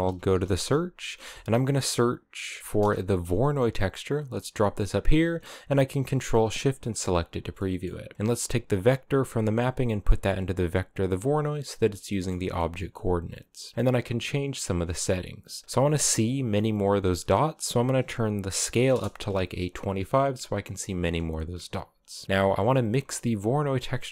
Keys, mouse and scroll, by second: 0.9 BackSpace, 2.4 Down, 4.3-5.8 middle drag, 5.8 ctrl+shift+click, 6.2 click, 7.2-8.8 middle drag, 8.8 click, 11.8 middle click, 12.4 scroll up 2, 15.7-19.9 drag, 21.4-23.9 scroll down 3, 21.9 middle click.